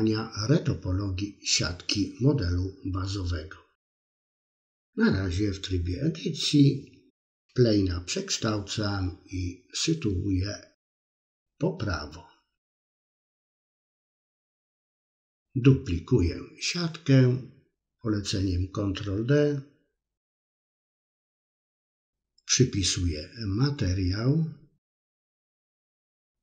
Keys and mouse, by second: 0.7 Tab, 1.4 click, 2.0-2.9 right drag, 3.2 right click, 4.7 i, 6.9 a, 7.1 KP_1, 7.6 r, 8.5 s, 9.5 g, 10.5 KP_3, 13.2 s, 14.6 shift+d, 16.9 middle click, 17.8 KP_3, 18.3 click, 19.6 middle click, 20.9-22.1 drag, 22.6-26.4 drag.